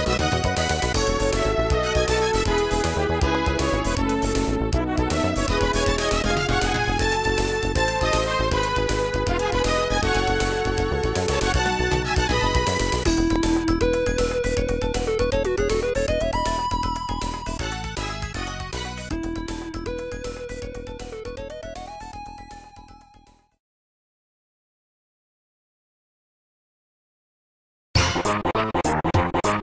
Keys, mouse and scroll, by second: 0.7 ctrl+a, 5.6 click, 5.9 Tab, 6.6 click, 6.7 click, 8.3 click, 9.4 click, 10.3 click, 12.5-13.3 typing, 21.0 click, 21.5 click, 22.2 click, 22.3 click, 22.8 click, 24.0 right click, 25.4 click, 27.5 Tab, 27.9 click, 29.1 g.